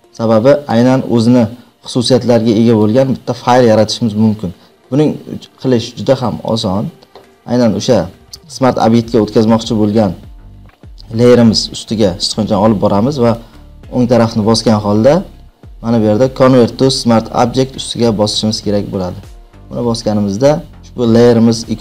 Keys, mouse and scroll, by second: 0.6 click, 2.7 click, 13.5 right click, 14.4-15.5 right drag, 15.7 right click, 20.8 click.